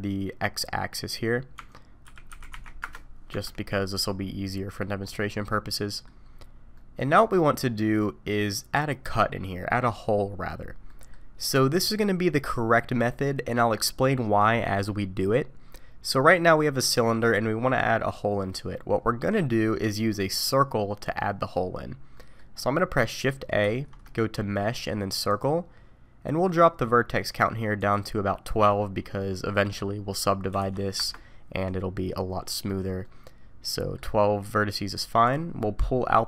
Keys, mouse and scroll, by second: 0.2-0.9 scroll up 2, 1.6 Tab, 2.1 r, 3.3 Tab, 4.0 middle click, 5.0 scroll up 4, 5.5 middle click, 6.2 scroll down 3, 6.7 middle click, 7.8-8.5 scroll up 2, 10.9 middle click, 17.0 middle click, 19.5 middle click, 21.7-22.1 scroll down 3, 22.1 middle click, 23.6 shift+a, 26.5 click, 27.8 click, 33.0 middle click, 35.2 click, 35.6 middle click.